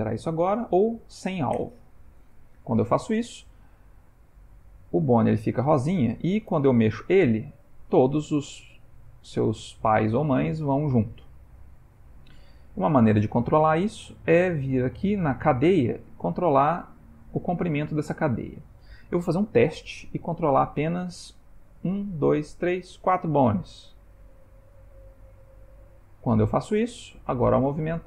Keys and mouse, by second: 4.7 click, 5.7 g, 24.4 click, 24.9 click, 25.3 click, 25.9 click, 27.3 g.